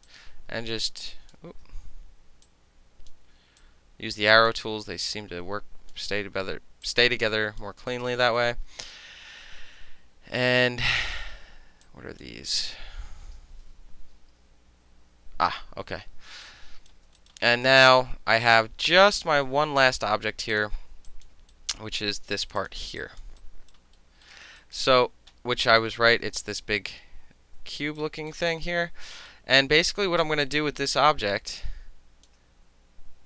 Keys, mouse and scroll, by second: 0.1-1.3 drag, 1.5 ctrl+z, 2.5-3.1 drag, 3.1-3.6 middle drag, 3.6-4.5 drag, 4.5 middle click, 5.1-5.9 drag, 5.9-6.9 middle drag, 6.9-7.6 drag, 7.6-7.9 alt+middle drag, 7.9 alt+right click, 8.0 alt+middle click, 8.4 alt+middle click, 11.9-12.2 drag, 13.8 shift+i, 16.5-16.9 right drag, 16.9 click, 16.9 alt+middle drag, 17.2 alt+click, 17.3 alt+middle click, 17.6 alt+middle click, 17.7 alt+click, 17.7 alt+middle click, 18.5 alt+click, 20.5 click, 21.1 alt+click, 21.5 alt+right click, 22.5 alt+click, 22.6 alt+click, 22.8 alt+middle click, 23.0 alt+click, 23.2 alt+middle click, 23.4 alt+right click, 23.7 alt+middle click, 24.3 alt+middle click, 24.6 alt+right click, 24.8 alt+middle click, 26.0 alt+middle click, 27.8 alt+right click, 28.3 alt+middle click, 28.5 alt+right click, 28.7 alt+middle click, 29.3 alt+middle click, 29.8 alt+middle click, 30.5-32.3 alt+drag, 32.3-33.2 alt+middle drag.